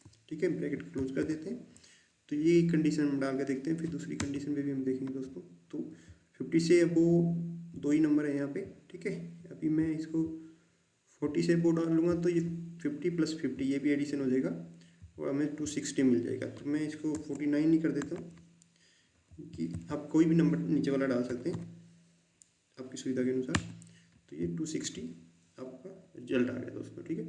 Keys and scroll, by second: 1.0 shift+0, 4.1 Return, 17.1 BackSpace, 18.0 Delete, 19.2-19.6 typing, 21.4 Right, 23.5 Return.